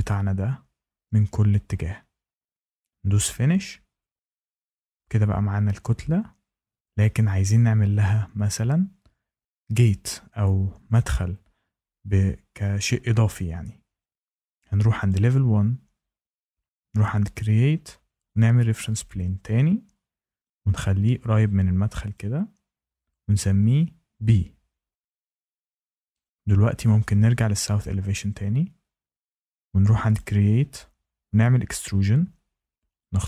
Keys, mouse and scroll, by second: 0.0 click, 0.6 Escape, 3.1 click, 15.0 click, 16.9 click, 18.3 click, 20.4 click, 22.1 click, 23.3 click, 24.2 b, 25.2 click, 27.7 click, 30.1 click, 31.3 click, 32.9 click.